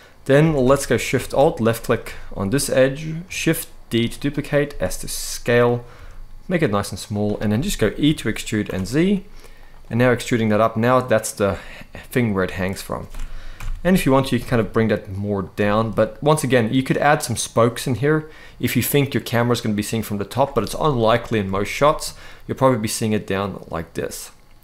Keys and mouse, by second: 0.1 alt+a, 0.4 shift+middle click, 3.7 shift+d, 4.0 right click, 4.3 s, 5.3 click, 5.6 s, 6.7 click, 7.3 middle click, 7.7 e, 8.3 z, 9.6-10.9 middle drag, 12.0 middle click, 13.2 ctrl+l, 13.7 g, 14.1 z, 15.2 middle click, 17.6-20.0 middle drag, 20.6 middle click, 21.3 shift+middle click, 21.7-23.3 middle drag.